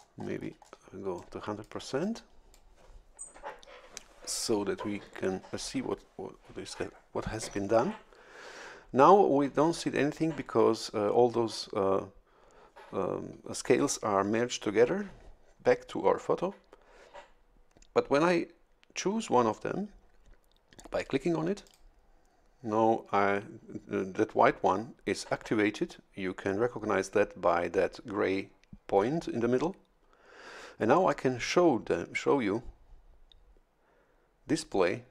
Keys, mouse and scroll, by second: 1.1 click, 2.0 click, 21.6 click.